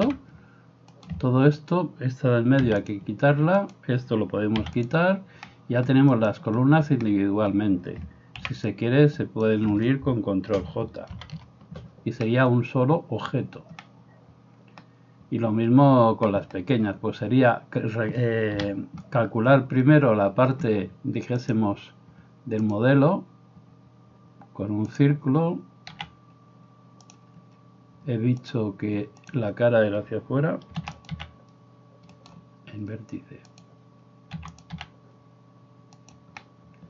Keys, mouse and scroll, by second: 0.1 g, 1.7 middle click, 1.7 right click, 2.6 x, 3.7 middle click, 3.7 right click, 4.6 x, 6.2 middle click, 6.2 right click, 8.5 b, 11.1 ctrl+j, 18.6 KP_7, 26.0 s, 27.2-28.4 middle drag, 28.4-31.1 drag, 30.9 e, 31.1-33.5 middle drag, 31.1 s, 33.5-34.8 drag, 34.4 e, 34.8-36.8 middle drag, 34.8 s.